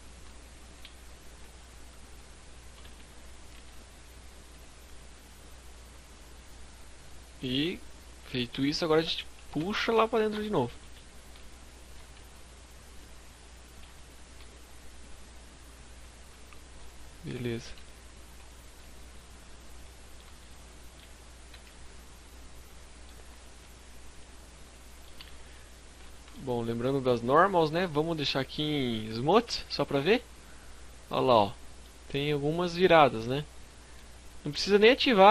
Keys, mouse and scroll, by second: 0.4 click, 2.0 e, 2.3 right click, 2.6 s, 3.7 click, 4.2 click, 5.7-6.1 scroll down 4, 6.1 middle click, 7.7 scroll down 1, 7.8 scroll up 1, 8.0 scroll down 1, 8.5 KP_1, 8.8 KP_3, 9.2 KP_5, 9.5 z, 10.4 shift+middle click, 10.4 scroll down 1, 11.2 e, 11.4 right click, 11.9 click, 12.8 shift+middle click, 13.8 click, 15.6 scroll down 2, 15.8 middle click, 16.4 z, 17.2 KP_5, 18.4 scroll down 2, 18.9 middle click, 19.3 a, 19.5 middle click, 20.0 Tab, 20.5 scroll down 2, 20.5 a, 20.6 middle click, 22.1-22.6 scroll up 4, 22.5 middle click, 24.2 scroll up 1, 24.7 scroll down 4, 25.0 shift+middle click, 25.3 scroll up 1, 25.4 middle click, 26.1 right click, 28.2 click, 28.8 scroll up 1, 28.9 middle click, 31.2-31.8 scroll up 2, 31.7 middle click, 32.4 scroll down 2, 32.8 middle click.